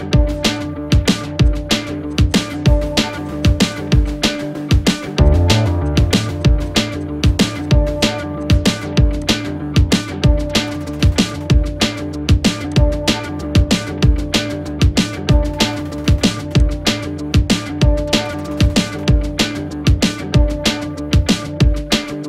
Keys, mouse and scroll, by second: 0.0 space, 0.5 click, 0.6 space, 1.4 click, 3.3 space, 3.4 click, 3.5 space, 4.0 click, 10.6 ctrl+-, 10.9 ctrl+0, 12.7 click, 16.0-16.6 scroll up 1, 17.0 click, 19.2-20.1 typing.